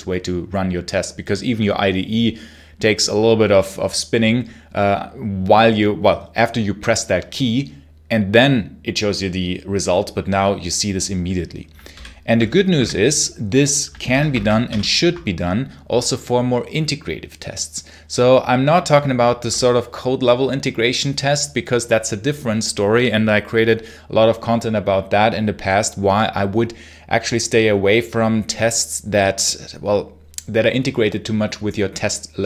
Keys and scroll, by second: 11.8 super+l, 12.3-13.1 typing, 13.9 super+h, 14.2 ctrl+c, 14.5 ctrl+l.